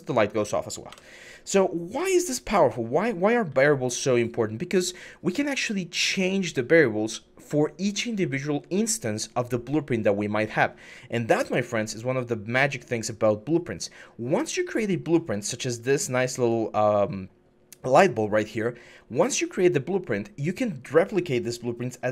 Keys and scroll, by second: 0.7 Escape.